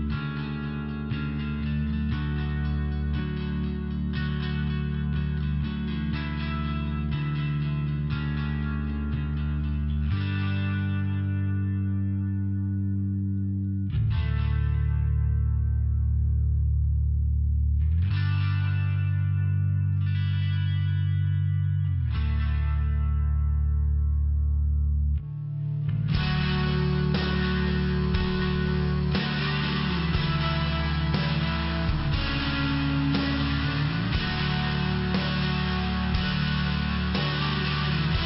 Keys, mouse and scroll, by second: 2.2 click, 2.3 click, 3.8 click, 3.8 click, 9.5 click, 11.2 click, 11.3 click, 11.6 click, 11.7 double click, 11.9 double click, 12.0 double click, 12.3 double click, 12.4 double click, 12.7 double click, 12.8 double click, 13.4 click, 13.5 click, 14.0 click, 14.0 click, 15.0 click, 15.1 click, 16.8 click, 16.9 click, 17.3 click, 17.5 click, 18.1 click, 18.2 click, 18.6 click, 18.7 click, 19.5 click, 23.9 click, 24.0 click, 24.4 click, 24.5 click, 24.9 click, 25.0 click, 25.4 click, 25.5 click, 26.0 click, 26.1 click, 26.7 click, 26.8 click, 27.2 click, 27.3 click, 27.7 click, 27.8 click, 28.4 click, 28.4 click, 30.1 click, 31.4 click, 31.5 click, 31.8 click, 31.9 double click, 33.1 click, 34.1 click, 34.5 click, 35.0 click, 35.1 click, 35.4 click, 35.6 click, 36.2 click, 36.4 click, 36.8 click, 36.9 click, 37.3 click, 37.4 click, 37.9 click, 37.9 click.